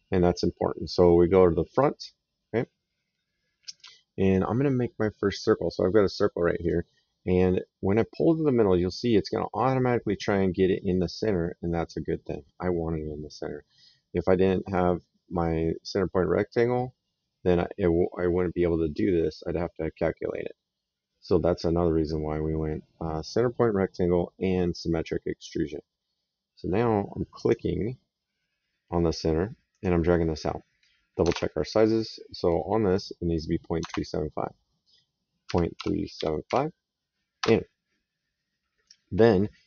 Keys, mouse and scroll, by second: 1.6 click, 2.7 middle click, 6.4 click, 27.2 click, 29.6 click, 31.1 alt+Tab, 33.8 alt+Tab, 35.3 KP_Decimal, 35.6 KP_3, 37.2 Return, 37.2 KP_Enter.